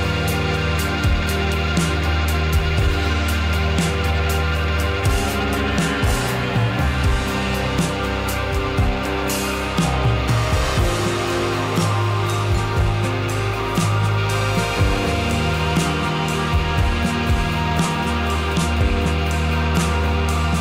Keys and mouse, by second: 0.4 click, 0.6-1.2 middle drag, 1.5 shift+click, 1.8 Tab, 2.3-3.3 drag, 3.9-4.2 shift+middle drag, 4.7-5.2 middle drag, 5.6 shift+middle drag, 6.1 shift+middle click, 6.5 shift+click, 7.0 click, 7.9 shift+click, 8.2 click, 10.0 Tab, 18.1 right click, 19.7 shift+right click, 20.0 shift+right click.